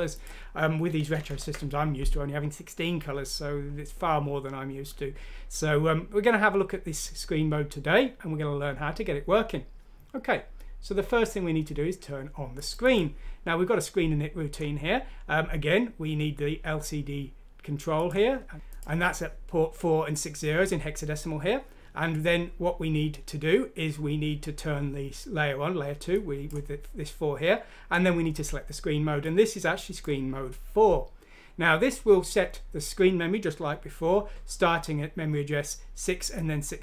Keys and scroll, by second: 1.3 ctrl+Home, 18.4 Left.